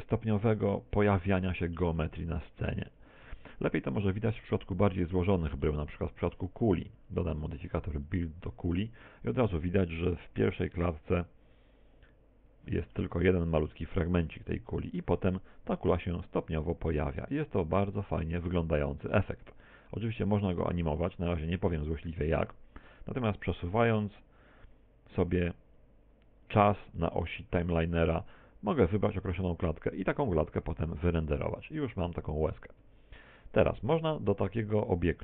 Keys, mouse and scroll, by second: 2.0 middle click, 2.9 middle click, 3.5 x, 4.3 shift+a, 5.2 middle click, 9.1 click, 12.3 click, 14.0 middle click, 16.8 click, 24.6 click, 33.8 Escape.